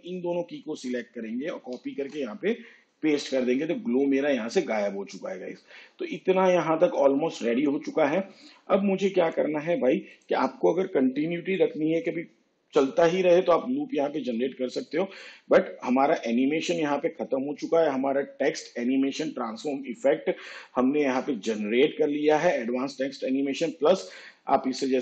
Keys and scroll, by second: 1.6 ctrl+c, 2.1 ctrl+v.